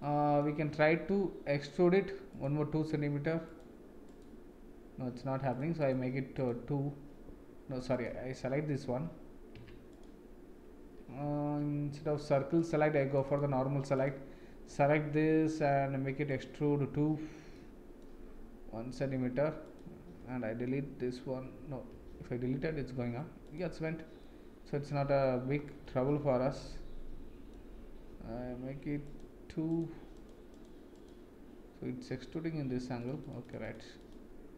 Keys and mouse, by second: 0.0-0.4 middle drag, 2.4 click, 4.0 click, 5.5 click, 6.4 click, 7.9 click, 8.9 Tab, 9.5 Tab, 12.8 click, 13.2 click, 13.9 click, 16.3 click, 17.5 middle click, 19.6 click, 21.9 Delete, 23.4 click, 24.2-25.2 middle drag, 25.8-27.5 middle drag, 29.0 click, 29.7 click, 30.9 click, 33.0 click, 33.6 click, 34.0 click.